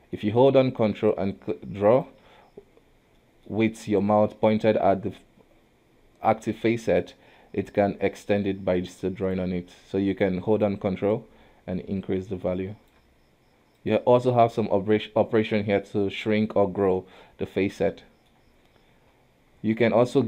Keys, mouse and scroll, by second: 0.8-3.2 ctrl+drag, 3.2-6.2 middle drag, 7.0-9.7 ctrl+drag, 9.7 middle click, 10.6-13.7 ctrl+drag, 13.8-16.9 drag, 17.9 middle click, 18.3-18.9 scroll down 1, 18.9 KP_1, 19.6 Tab, 20.1 alt+a.